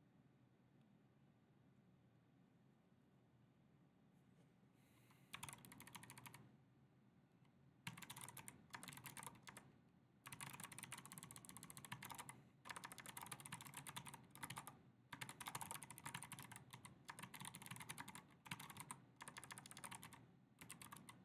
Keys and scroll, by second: 5.5-6.3 typing, 7.7-21.2 typing.